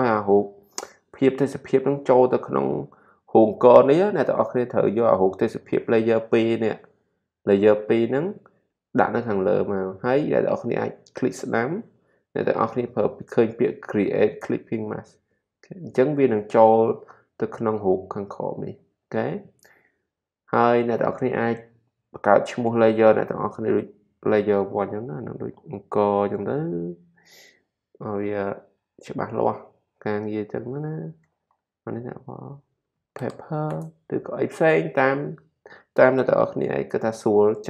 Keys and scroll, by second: 25.2-27.0 typing, 29.9-31.3 typing, 32.5-33.7 typing.